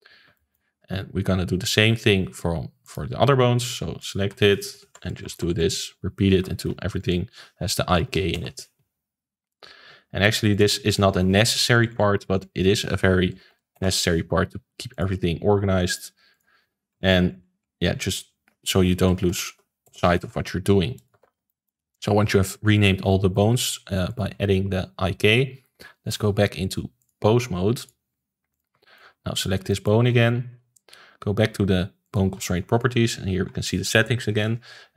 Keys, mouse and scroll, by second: 0.0 Left, 0.3-2.8 shift+middle drag, 2.8 click, 3.9-5.0 drag, 5.0 BackSpace, 5.2 BackSpace, 5.5 BackSpace, 7.0 Left, 9.5 click, 10.5-11.5 drag, 11.5 BackSpace, 11.9 BackSpace, 12.3 Left, 14.9 click, 15.8-17.1 drag, 17.1 BackSpace, 17.6 BackSpace, 18.1 Left, 20.9 click, 21.2 ctrl+s, 21.4-24.0 shift+middle drag, 24.0 click, 25.6-27.0 shift+middle drag, 27.0-28.6 drag, 28.8-29.3 shift+middle drag, 29.3 click, 29.6-30.5 shift+middle drag, 30.5 ctrl+s, 32.0 click.